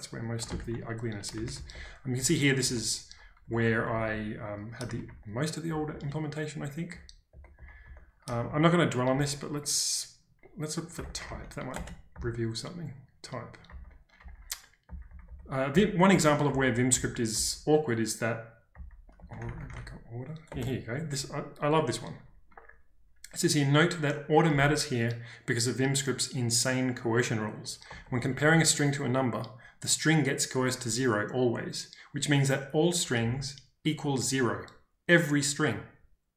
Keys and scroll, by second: 0.0-0.6 typing, 0.5 ctrl+space, 1.5 ctrl+d, 1.7 ctrl+d, 3.4-4.0 typing, 5.0 ctrl+d, 5.6 ctrl+d, 8.3 ctrl+d, 9.1 /, 10.7-12.1 typing, 11.8 Return, 13.4-15.3 typing, 18.9-20.2 typing, 20.5 Return, 24.5 shift+v, 27.8 Escape, 28.0 Escape, 28.3 j, 33.1 j.